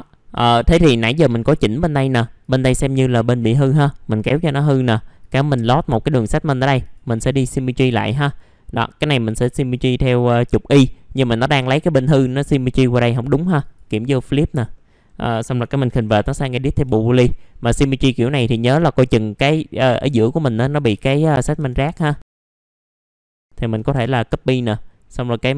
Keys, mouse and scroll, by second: 0.4 click, 0.9-1.5 scroll down 1, 1.8 middle click, 2.4 click, 3.1 alt+middle click, 3.5-4.2 scroll up 1, 4.2-5.2 scroll up 1, 5.2 click, 11.5-12.2 scroll down 1, 13.6 click, 14.3-14.7 scroll up 1, 14.7 middle click, 16.5 scroll up 1, 16.7 F3, 17.6 click, 18.3 scroll up 1, 18.6 alt+middle click, 20.5 alt+middle click, 21.2-21.6 scroll down 1, 21.6 F4, 22.1 middle click, 22.3 alt+middle click, 22.4 click, 22.6 alt+middle click, 23.3 shift+click.